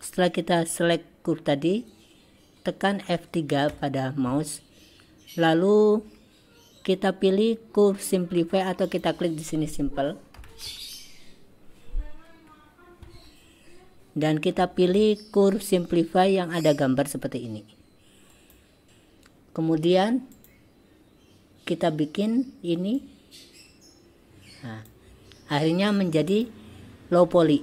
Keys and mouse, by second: 3.8 F3, 20.4 click, 23.0-25.0 drag, 26.3 click.